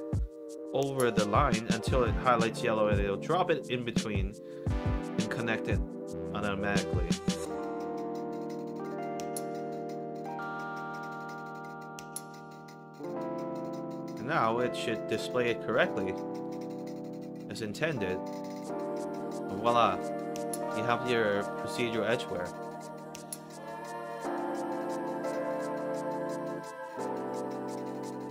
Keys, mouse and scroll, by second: 14.8 alt+right click, 15.2 alt+click, 15.9 alt+middle click, 16.3 alt+right click, 16.6 alt+click, 17.3 alt+middle click, 17.9-19.1 alt+drag, 19.3 alt+middle click, 19.7 alt+right click, 19.9 alt+click, 21.1 alt+right click, 21.6 alt+middle click, 22.1 alt+right click, 22.4 alt+click, 22.7 alt+middle click, 24.1 click, 24.3 click.